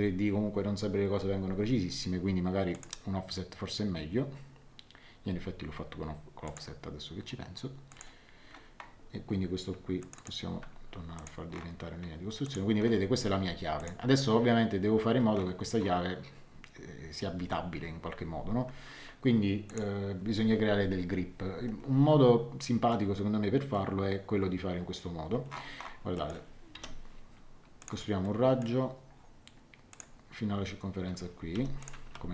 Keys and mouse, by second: 2.7 click, 6.4 click, 7.9 click, 10.0 click, 10.5 x, 11.1 click, 12.4 click, 13.7 click, 19.6 click, 26.1 middle click, 26.7 l, 27.8 click, 28.2 middle click, 29.9 click, 31.5 Escape, 31.8 click, 32.0 x.